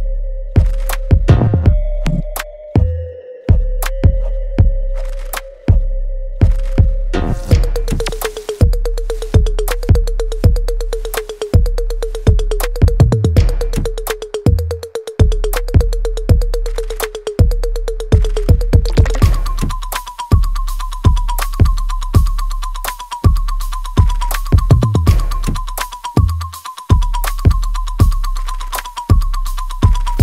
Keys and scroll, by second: 0.6 p, 20.5 super+z, 26.5 space, 27.0 space, 27.0 space.